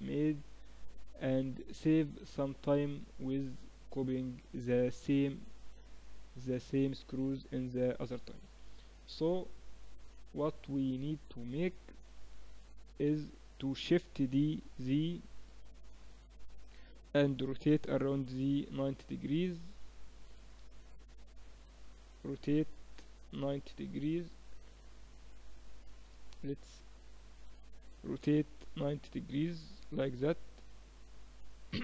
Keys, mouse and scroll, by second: 14.1 shift+d, 16.0-20.6 middle drag, 17.4 r, 21.2 KP_7, 21.6-22.7 middle drag, 22.7 r, 26.8-28.7 drag, 27.9 r, 30.1-31.8 drag.